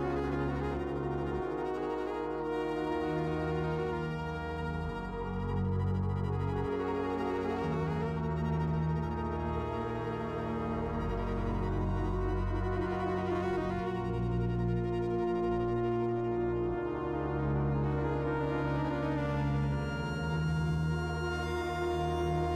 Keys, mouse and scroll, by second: 0.0-1.7 typing, 0.3 click, 0.5 middle click, 0.6 ctrl+z, 0.9 click, 1.5 middle click, 2.0 ctrl+r, 2.4 Tab, 2.4 middle click, 2.7-5.0 typing, 3.0 Tab, 3.3 click, 3.4 Tab, 3.4 click, 3.7 middle click, 4.2 click, 4.6 right click, 5.0 middle click, 5.1 middle click, 5.5 click, 5.9 click, 6.1 click, 6.3 middle click, 6.3-15.8 typing, 7.4 Tab, 7.4 shift+middle click, 7.5 click, 7.7 click, 9.6 middle click, 9.7 ctrl+z, 11.4 middle click, 12.4 middle click, 12.5 click, 13.3 middle click, 13.7 click, 13.7 middle click, 14.1 middle click, 14.1 click, 14.7 middle click, 15.3 middle click, 15.5 Tab, 15.7 shift+click, 15.8 click, 17.0 middle click, 17.1-22.4 typing, 17.3 Tab, 17.3 click, 18.3 click, 18.5 click, 18.9 Tab, 19.2 click, 19.6 middle click, 20.9 Tab, 21.4 Tab, 21.8 middle click, 22.1 click, 22.2 click, 22.4 click, 22.5 middle click.